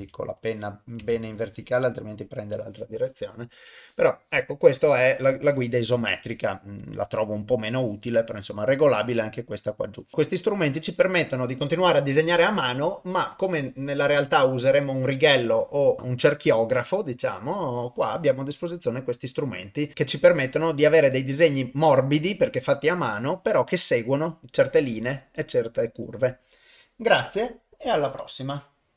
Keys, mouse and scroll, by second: 0.0 ctrl+z, 0.4 click, 1.2 ctrl+z, 1.3-2.4 drag, 5.6-6.0 drag, 6.8-10.1 drag.